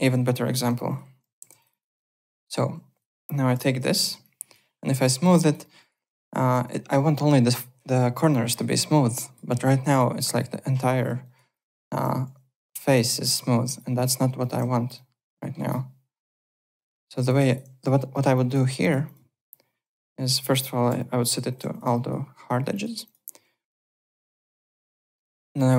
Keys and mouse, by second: 0.6 F4, 0.8 click, 1.1-3.9 typing, 1.6 click, 2.0 click, 2.9 click, 3.9 click, 4.2 click, 5.0 F4, 5.3 alt+click, 5.6 alt+middle click, 5.7 alt+right click, 5.9 alt+click, 8.6 alt+click, 10.0 alt+click, 10.9 click, 11.2 alt+right click, 11.5 alt+click, 12.0 1, 12.4 F3, 12.6 click, 13.7 click, 14.2 F4, 14.4 click, 14.7 alt+middle click, 14.9 alt+click, 15.3 alt+middle click, 15.5 alt+right click, 15.7 alt+click, 16.7 alt+middle click, 17.1 alt+right click, 17.4 alt+click, 17.8 `, 18.1 alt+middle click, 18.3 alt+click, 18.7 `, 18.8 click, 20.0 alt+click, 21.5 alt+click, 21.6 `, 21.7 click, 21.9 alt+click, 22.7 alt+click, 23.0 click, 24.0 3, 24.2 click, 24.4 alt+middle click, 24.6 alt+click, 25.5 alt+middle click.